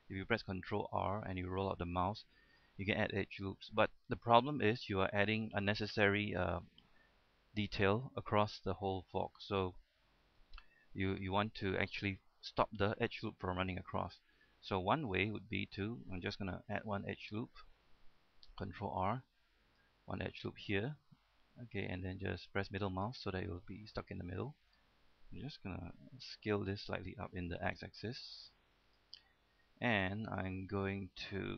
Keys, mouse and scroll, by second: 0.8 ctrl+r, 1.8-2.8 scroll up 1, 15.7 right click, 16.8 shift+middle click, 17.9-18.5 scroll up 1, 18.8 ctrl+r, 19.7 click, 23.1 middle click, 24.2 scroll up 1, 24.6-26.1 shift+middle drag, 26.8 s, 27.9 x, 29.1 click, 29.3 middle click, 30.0-30.6 scroll up 1, 30.7 shift+middle click, 31.1-31.5 scroll up 1.